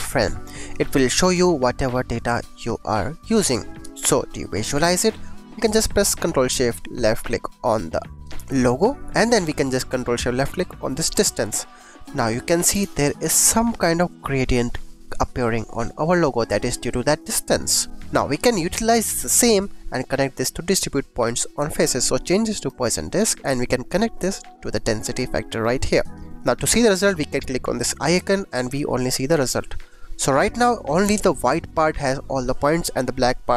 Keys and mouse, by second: 0.4 click, 4.4 click, 7.1 ctrl+shift+click, 9.0 click, 11.0 ctrl+shift+click, 11.8 click, 12.4 click, 12.7 g, 12.7 x, 16.7 click, 17.8 shift+click, 18.3 click, 18.9 g, 19.2 click, 19.4 click, 19.9 click, 21.7 click, 23.0 click, 24.2-25.6 drag, 26.2 click, 27.9 click, 29.8 click, 30.4 click, 31.0 g, 31.2 click.